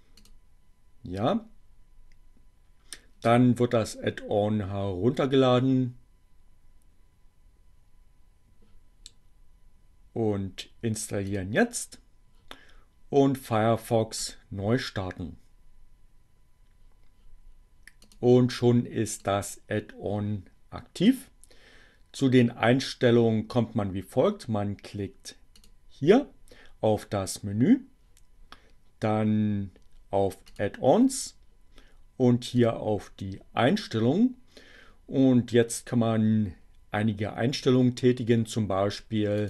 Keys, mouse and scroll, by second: 0.1 click, 11.0 click, 13.2-14.5 drag, 18.1 click, 19.2-21.4 drag, 30.5 click, 32.6 click, 38.6 click.